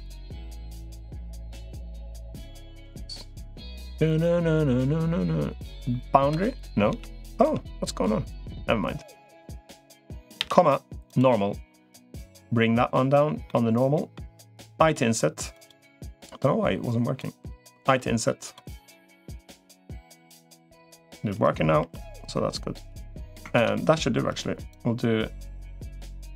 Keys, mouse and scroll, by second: 12.1 click, 12.3 ,, 13.3 middle click, 14.7 i, 15.9-17.1 drag, 18.5 i, 19.3-20.5 drag, 21.7 i, 23.5 ctrl+z, 24.5-25.9 drag.